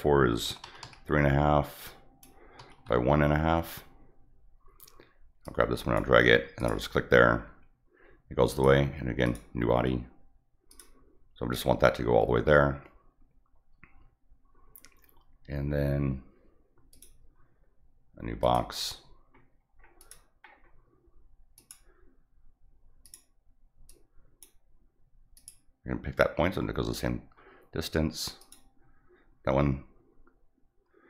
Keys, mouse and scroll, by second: 1.8 click, 5.4 click, 6.6 click, 8.4 click, 9.2 click, 10.7 click, 16.9 click, 18.4 click, 19.5 middle click, 19.6 middle click, 20.0 click, 20.5 scroll up 2, 21.5 click, 23.0 click, 23.9 click, 25.3 click, 28.4 click.